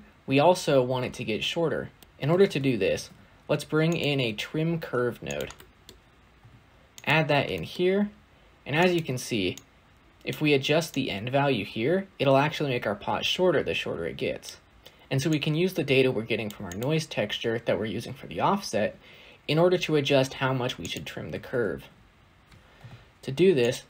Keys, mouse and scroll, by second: 2.0-2.3 scroll up 3, 2.3 shift+a, 5.4 middle click, 5.8 scroll up 1, 6.0-6.3 scroll down 1, 6.3 g, 7.4 middle click, 7.6 scroll up 2, 8.7 click, 9.4 click, 10.8-13.8 drag, 14.7 scroll down 1, 15.2 click, 16.6 click, 20.7 click, 21.4 shift+a.